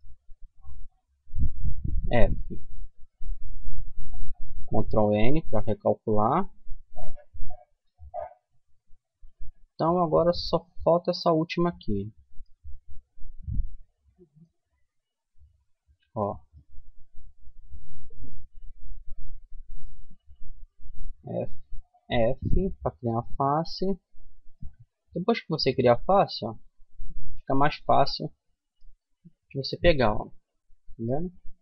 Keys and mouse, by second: 1.1 middle click, 1.2 f, 2.0 a, 2.4 a, 3.8 ctrl+n, 4.6 a, 5.2 middle click, 10.7-15.8 middle drag, 15.8 click, 16.4 middle click, 16.5 right click, 17.3 middle click, 17.7-19.9 middle drag, 19.9-21.8 right drag, 21.2 f, 22.0 middle click, 25.3-26.7 right drag, 26.4 f, 26.7-29.2 middle drag, 29.2 right click, 30.0-31.6 middle drag.